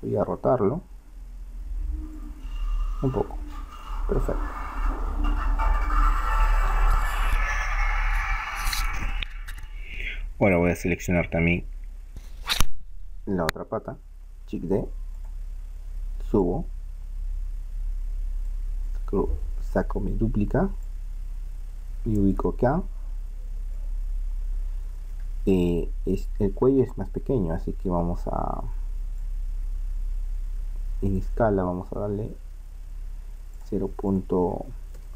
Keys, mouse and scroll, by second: 1.0 r, 3.1-4.3 drag, 4.3-9.0 middle drag, 10.9-14.0 right drag, 14.5 shift+d, 16.5 click, 18.9-20.8 middle drag, 21.0-22.7 drag, 23.0-26.5 middle drag, 29.2-31.2 drag, 33.6-35.1 drag.